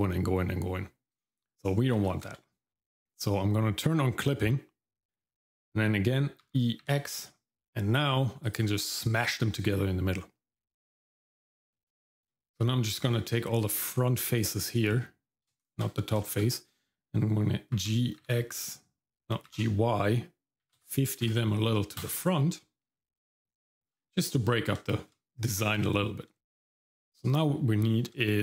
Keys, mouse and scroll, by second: 2.1 ctrl+z, 4.2 click, 6.4 e, 11.9 shift+middle click, 12.5 Tab, 12.6 Tab, 13.6 click, 15.6 shift+click, 16.2 shift+middle click, 17.7 g, 23.1 scroll down 1, 23.4 shift+middle click, 24.9 shift+middle click, 25.4 Tab, 26.4-28.1 shift+middle drag, 28.3 middle click.